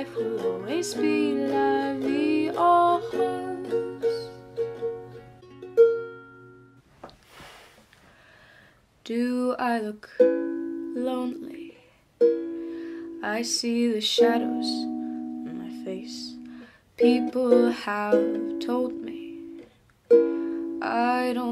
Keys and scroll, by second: 7.0 ctrl+alt+y, 7.9-8.8 typing.